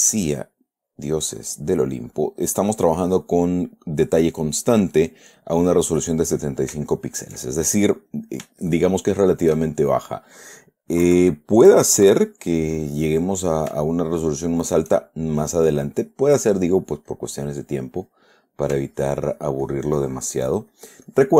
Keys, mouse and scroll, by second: 0.8 click, 6.9 scroll down 3, 7.5 shift+scroll up 1, 8.4 click, 8.8 shift+middle click, 9.1 shift+middle click, 9.2 shift+right click, 10.1 shift+middle click, 11.4 KP_Add, 13.0 middle click, 14.0 shift+middle click, 14.3 shift+middle click, 15.9 middle click, 17.5-18.7 drag, 19.2-21.3 ctrl+drag.